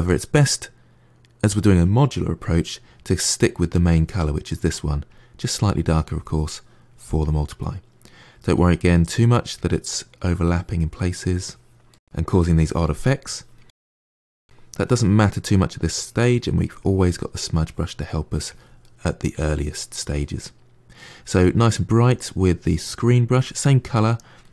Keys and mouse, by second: 3.6 click, 5.0 click, 5.3 middle click, 6.0 click, 6.4 middle click, 7.1 click, 7.5 middle click, 8.4 click, 8.8 middle click, 9.4 click, 9.8 middle click, 10.3 click, 10.8 middle click, 11.4 click, 11.8-13.4 middle drag, 13.6 middle click, 14.2 click, 14.4 middle click, 14.9 click, 15.3 middle click, 15.8 click, 16.2 middle click, 16.6 click, 17.0 middle click, 17.5 click, 17.8 middle click, 18.3 click, 18.7 middle click, 19.2 click, 19.7-21.4 middle drag, 21.4 click, 21.9-24.3 drag, 24.3-24.5 middle drag.